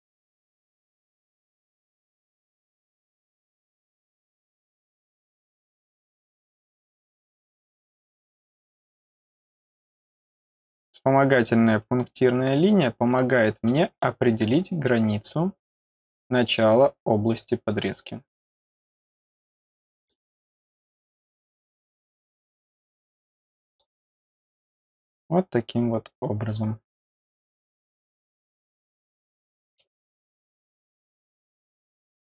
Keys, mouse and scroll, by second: 2.2 click, 3.8 scroll down 1, 5.6 click, 8.1 click, 10.0 click, 12.0-12.7 scroll up 2, 13.1 middle click, 13.6 middle click, 15.9 click, 17.8 click, 19.9 click, 21.0 click, 21.2 click, 22.3 click, 23.5 click, 23.6 click, 24.6 middle click, 26.4 click, 27.4-28.6 drag, 31.3 click.